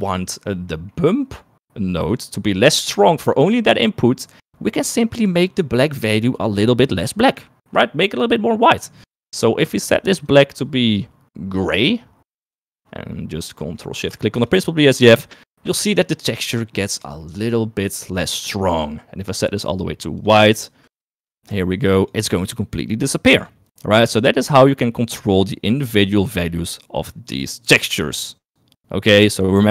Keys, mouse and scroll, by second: 1.3 middle click, 3.3 middle click, 9.8 click, 13.6 middle click, 14.1 middle click, 14.6 ctrl+shift+click, 16.9 middle click, 17.4 middle click, 19.4 click, 20.5 click, 21.3 click, 23.5 click.